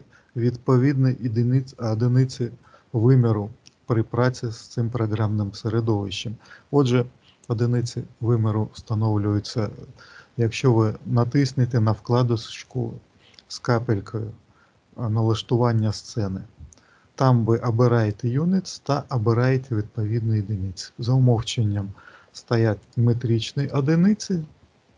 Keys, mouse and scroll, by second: 15.7 click, 17.9 click, 22.6 click.